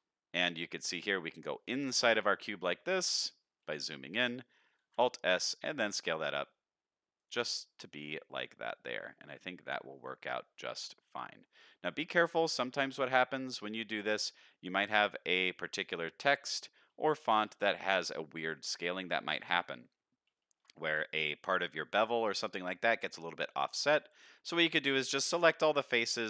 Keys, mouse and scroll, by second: 0.1-0.9 scroll up 2, 0.5 middle click, 1.0-1.6 scroll up 2, 1.7 shift+middle click, 2.3 middle click, 3.3 shift+middle click, 3.7 middle click, 4.8 alt+s, 7.7 middle click, 8.6-10.0 middle drag, 10.7-11.6 scroll down 4, 11.4 middle click, 12.1-12.9 scroll up 5, 13.0 shift+middle click, 14.2 middle click, 15.1 middle click, 15.5 shift+middle click, 17.0 shift+middle click, 19.4 shift+middle click, 20.3 shift+middle click, 22.2 shift+middle click, 22.8 middle click, 23.5 click, 24.5 shift+click, 24.8 shift+click, 25.6 shift+click, 26.0 shift+click.